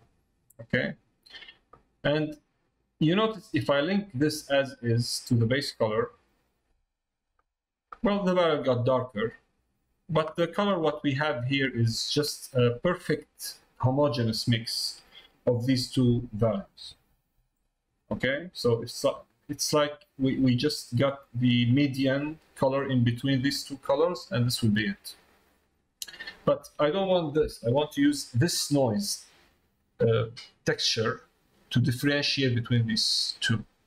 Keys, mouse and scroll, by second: 4.6-6.6 drag, 28.3 click, 31.0 click.